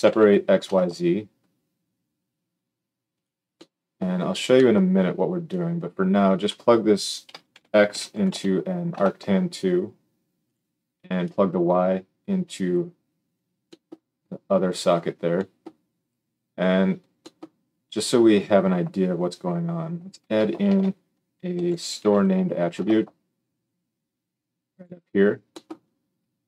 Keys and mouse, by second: 3.2-5.4 middle drag, 5.4-10.5 drag, 10.5 middle click, 11.2-24.9 drag, 20.6 shift+a, 24.9-26.4 middle drag.